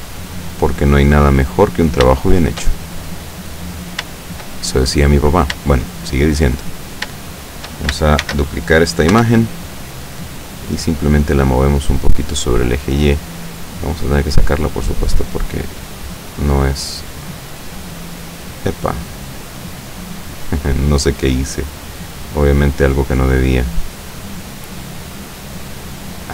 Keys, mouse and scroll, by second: 0.7 click, 1.1-1.9 middle drag, 2.0 scroll down 3, 2.3-4.0 shift+middle drag, 4.1-4.6 shift+middle drag, 4.7 shift+middle click, 5.4-5.7 shift+scroll up 1, 5.7-6.5 shift+middle drag, 7.3-7.9 shift+middle drag, 8.3 shift+d, 9.2 Return, 10.4-12.5 drag, 12.7-13.7 middle drag, 14.1-17.4 drag, 17.4 scroll down 1, 17.7-18.6 middle drag, 18.6 scroll down 1, 19.3-20.2 middle drag, 20.8-22.2 drag, 22.6-23.7 drag, 23.7-24.6 middle drag, 24.7 scroll up 1, 25.5-26.3 drag.